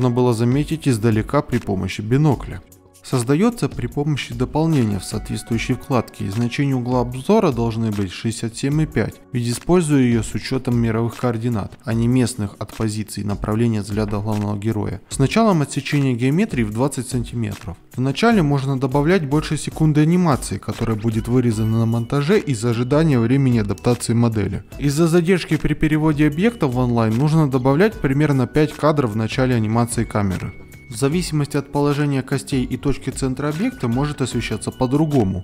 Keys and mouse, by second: 0.1 click, 0.5 z, 0.7 KP_0, 0.9 g, 1.0 x, 2.3 alt+a, 2.3 alt+KP_1, 2.8-3.4 drag, 3.6-5.8 typing, 3.8 click, 6.4 click, 6.8 click, 7.2-9.2 typing, 9.6 click, 9.9 click, 10.6 click, 11.2 click, 11.8 e, 11.8 e, 11.9 r, 12.1 r, 13.0 ctrl+z, 13.7 click, 14.3 g, 14.3 y, 14.5 y, 14.5 click, 14.7 y, 15.5 click, 15.8 click, 16.5 click, 16.7 click, 16.9-19.9 typing, 17.2 click, 17.5 click, 17.9 click, 18.3 click, 18.6 click, 19.0 alt+KP_1, 19.4 middle click, 20.5 click, 20.9 ctrl+Tab, 21.1 a, 21.5 a, 21.7 KP_Decimal, 22.0 middle click, 22.8 middle click, 23.2 alt+a, 25.1 alt+shift+z, 25.4 alt+shift+z, 25.5 ctrl+Tab, 26.0 click, 26.6 middle click, 26.9 click, 28.8-29.2 drag, 30.9 ctrl+Tab, 30.9 alt+KP_1, 30.9 a, 32.0 click, 32.4 a, 32.8 KP_Decimal, 34.1 click.